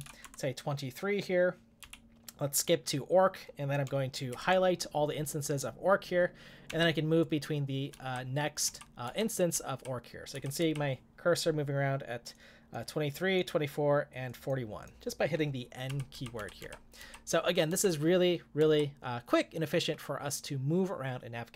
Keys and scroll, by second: 0.0-0.5 typing, 1.8 w, 4.3 shift+8, 6.7 n, 7.9-9.0 typing, 15.9-16.6 typing.